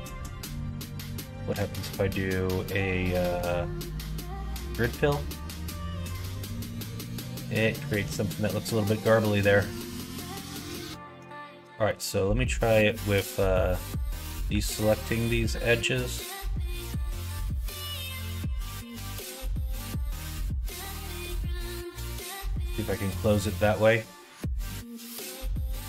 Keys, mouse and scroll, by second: 0.0 2, 1.5 ctrl+g, 3.8 ctrl+f, 5.2-7.6 middle drag, 7.9 ctrl+z, 8.4-9.4 middle drag, 10.5 alt+click, 11.8 middle click, 12.4 middle click, 13.7 shift+click, 14.3 middle click, 15.0 ctrl+click, 15.7 middle click, 16.8 middle click, 17.6 middle click, 18.4 c, 21.1 middle click, 22.0 middle click, 22.5 shift+middle click, 22.8 middle click, 24.0 middle click, 25.2 c.